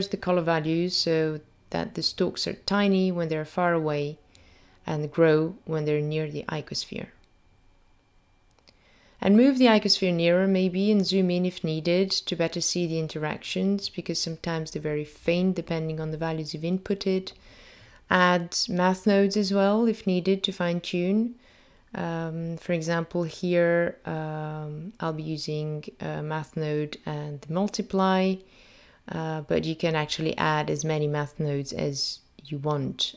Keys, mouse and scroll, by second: 1.8 click, 4.0-4.7 scroll down 2, 5.0 click, 5.9 g, 12.2 click, 13.2-13.9 scroll up 3, 13.9-14.3 scroll down 2, 18.6 click, 21.6 click, 22.5 click, 23.3 click, 24.2 shift+a, 24.4 click, 32.0 click.